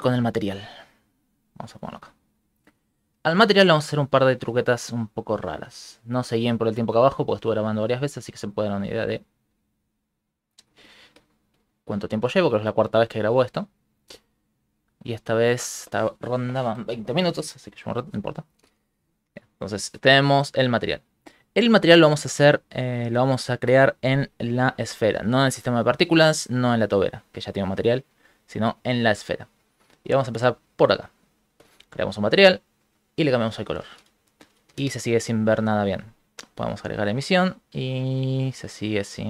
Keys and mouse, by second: 2.4 shift+middle click, 4.1 click, 8.1 click, 9.7 shift+middle click, 10.3 shift+middle click, 10.9 ctrl+middle click, 11.6 ctrl+middle click, 13.1 click, 13.6 click, 14.4 shift+middle click, 14.5 shift+middle click, 19.2 shift+F3, 21.8 middle click, 22.5 shift+middle click, 22.8 middle click, 23.5 shift+middle click, 23.9 ctrl+middle click, 24.3 right click, 25.1 shift+middle click, 25.5 right click, 26.2 right click, 28.2 right click, 29.0 shift+middle click, 29.9 click, 30.7 middle click, 31.9 click, 33.8 shift+space, 34.8 ctrl+shift+space, 36.1 click.